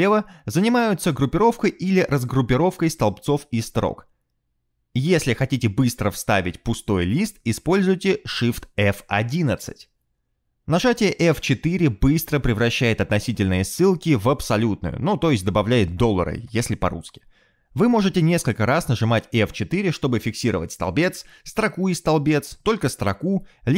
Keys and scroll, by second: 1.7 alt+shift+Left, 4.4 shift+F11, 5.3 shift+F11, 6.3 shift+F11, 14.6 F4, 15.7 F4, 19.7 F4, 20.6 F4, 22.6 F4, 23.1 F4.